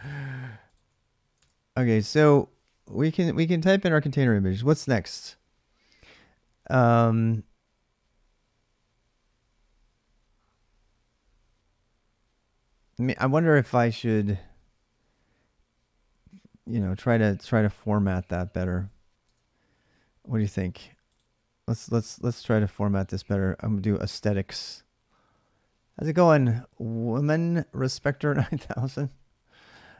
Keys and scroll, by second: 16.5 alt+Tab, 19.0 alt+Tab.